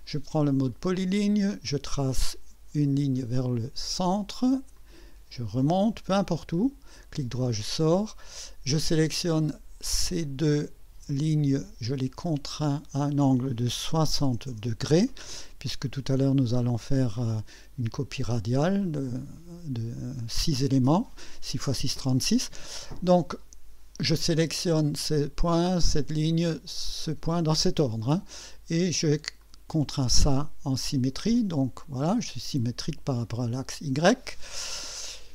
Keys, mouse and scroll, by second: 0.7 click, 2.0 click, 4.7 click, 6.0 click, 6.5 right click, 7.7 right click, 10.2 click, 11.4 click, 12.6 click, 14.0 KP_6, 14.2 KP_0, 14.4 KP_Enter, 17.1-18.8 drag, 23.3 click, 25.5 click, 26.8 click, 29.4 click, 31.3-33.2 drag.